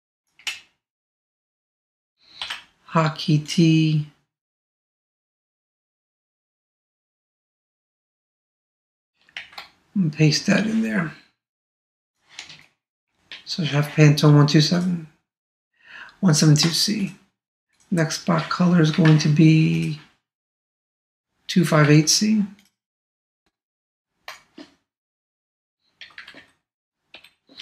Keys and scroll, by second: 9.3 super+v, 19.0 super+Tab, 21.8 super+Tab.